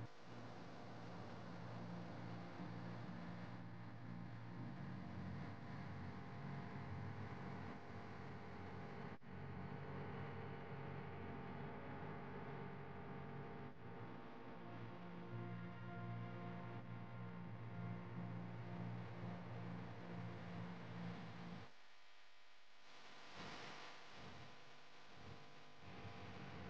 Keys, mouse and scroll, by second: 1.4 2, 2.6 alt+click, 3.8 e, 6.8 Tab, 7.3 click, 8.0-9.3 middle drag, 9.3 click, 10.5-11.2 middle drag, 11.2 click, 12.1 click, 15.3 click, 18.6 click, 19.4 shift+d, 20.8 click, 21.9 ctrl+z, 22.2 ctrl+z, 23.5 click, 24.1 click, 25.2 click, 26.3-26.6 drag.